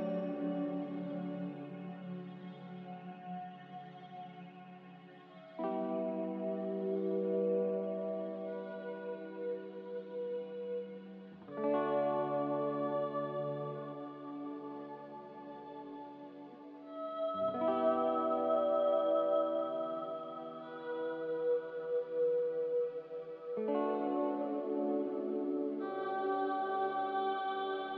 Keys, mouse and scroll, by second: 0.0-0.5 typing, 1.2 ctrl+z, 1.7 ctrl+z, 6.5 ctrl+y, 10.4 f, 11.6 a, 16.5 z, 18.2-20.1 typing.